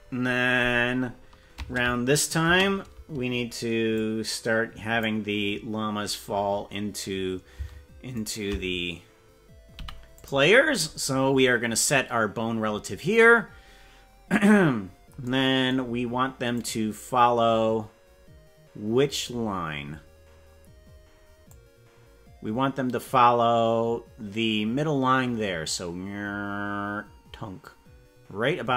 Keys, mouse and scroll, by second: 1.6 space, 2.4 space, 3.9-5.0 drag, 5.8-6.6 scroll down 5, 8.2 shift+right click, 14.4-14.8 scroll up 2, 16.5-19.1 drag, 19.6-20.2 scroll down 5, 20.4-20.8 scroll up 2, 21.4-24.8 drag.